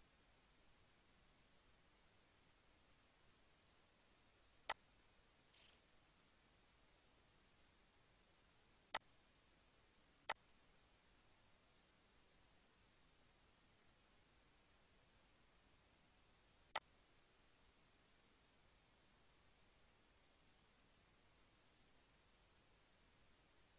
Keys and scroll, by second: 12.3 shift+e, 13.8 ctrl+a, 14.8 e, 15.6 ctrl+a, 17.7 Down, 19.9 Down, 20.4 Down, 22.0 Down.